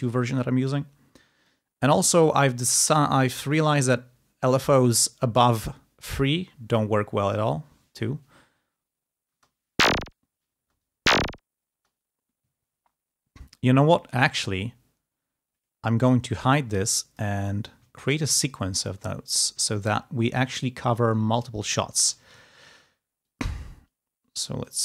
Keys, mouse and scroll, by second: 1.3 click, 9.3 space, 10.0-11.1 drag, 10.3 space, 11.6 space, 15.5 click, 16.9 click, 17.3-17.6 ctrl+scroll up 2, 17.9 ctrl+click, 18.2 ctrl+scroll down 2, 18.5 ctrl+scroll up 2, 19.9 ctrl+scroll down 2, 20.7 click, 22.0 e, 22.3 ctrl+scroll up 2.